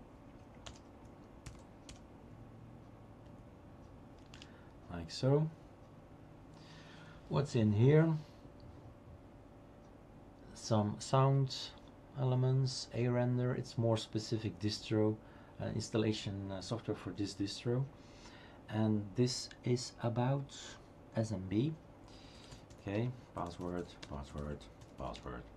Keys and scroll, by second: 0.3-1.9 typing, 3.3 Tab, 4.3 Return, 22.1-25.2 typing.